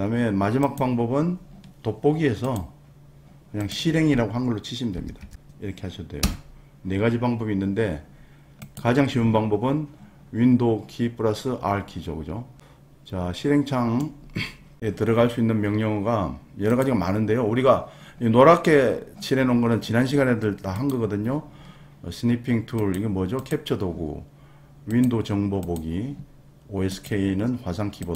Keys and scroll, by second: 5.2 t, 6.2 Return.